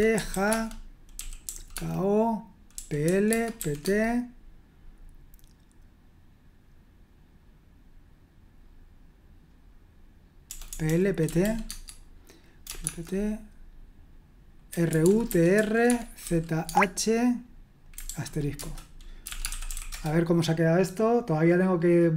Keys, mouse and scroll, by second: 0.0-4.5 typing, 10.5-12.8 typing, 14.4-16.2 typing, 16.6 Tab, 18.1-20.2 typing, 18.6 Return.